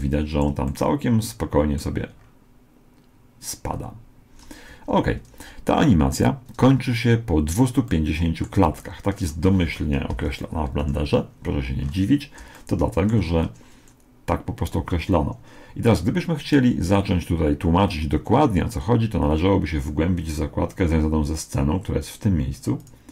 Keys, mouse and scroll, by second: 2.6-3.7 scroll down 1, 3.7 middle click, 4.3-5.6 scroll up 1, 5.6 Escape, 5.6 middle click, 7.9-10.7 middle drag, 10.1 KP_1, 10.8 KP_Decimal, 11.8-12.6 scroll up 1, 12.6-14.6 middle drag, 22.8-23.1 drag.